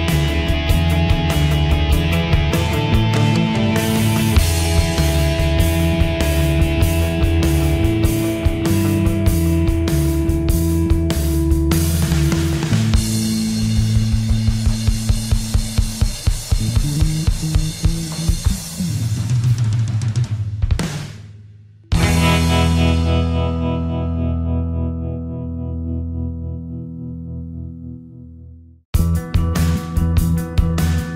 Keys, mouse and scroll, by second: 0.9 ctrl+u, 1.4 click, 5.4 shift+F11, 8.2 click, 12.5 Return, 13.7 click, 14.6 F4, 15.7 alt+click, 17.3 Escape, 17.7 click, 19.6 ctrl+z, 20.7 right click, 22.5 click, 30.4 Escape.